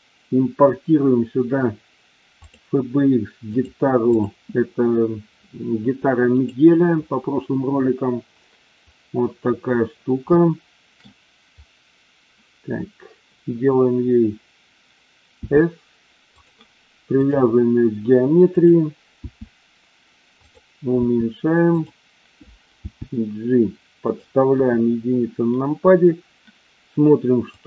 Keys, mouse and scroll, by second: 10.4-11.0 shift+middle drag, 15.2 s, 16.2 click, 17.1-18.8 drag, 19.1 s, 21.0 s, 21.8 click, 22.8 g, 24.0 click, 24.5 KP_1.